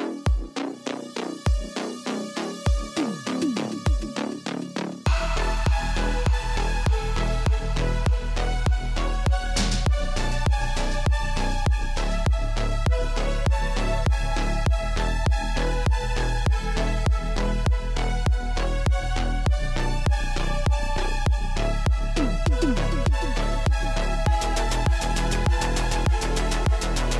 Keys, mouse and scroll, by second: 0.0-2.6 typing, 2.4 click, 4.7 space, 4.9 space, 5.5 space, 5.7-6.7 scroll, 7.4 click, 7.9 click, 8.4 ctrl+c, 8.7 ctrl+d, 9.2 click, 9.4 right click, 10.0 click, 11.2 click, 12.2-14.1 typing, 15.0 click, 15.3 click, 15.7 v, 16.3 scroll, 19.5 shift+click, 22.1 shift+click, 23.4 shift+click, 24.7 click, 25.0 middle click, 26.4 click, 26.5-26.9 scroll.